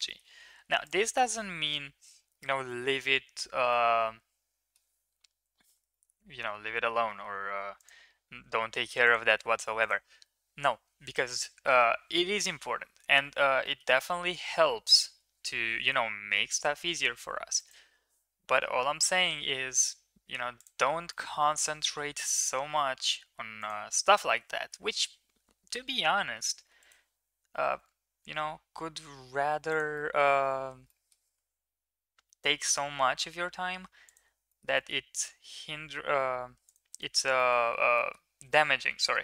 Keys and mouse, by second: 0.1 middle click, 0.4 3, 0.8 click, 2.6 middle drag, 3.6-4.7 middle drag, 5.8 shift+middle click, 6.2 1, 7.0 middle click, 7.4 3, 8.4 shift+s, 9.5 middle click, 13.2 Tab, 13.6 shift+middle drag, 13.9 middle click, 14.4 shift+a, 18.9 s, 21.1 middle click, 21.6 s, 25.0 s, 29.9-30.3 middle drag, 30.8-31.2 middle drag, 34.5 shift+middle click, 34.7 middle drag, 35.1 s, 36.9 middle click, 38.1 middle click.